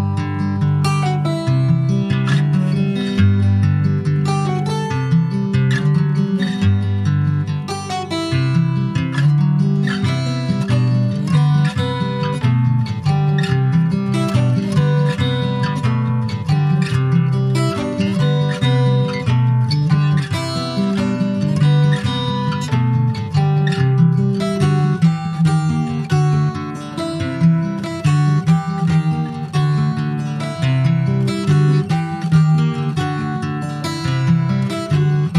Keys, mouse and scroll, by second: 0.0-2.9 middle drag, 2.9 click, 4.1 click, 11.1 ctrl+s, 11.5-12.5 middle drag, 12.5-15.7 drag, 16.0 ctrl+s, 16.3 middle click, 17.1 shift+a, 20.1 click, 21.0 ctrl+s, 21.1 click, 21.9 alt+middle click, 23.1 click, 23.6-24.1 scroll down 4, 24.1 scroll up 1, 24.8 click, 27.6 Tab, 27.6-29.5 middle drag, 29.5 3, 29.6 click, 29.9 scroll down 2, 30.1 middle click, 31.0 ctrl+s, 31.6 click, 32.1 click, 32.5 shift+middle click, 33.4 click, 34.6 shift+middle click, 34.9-35.3 scroll up 3, 35.1 middle click.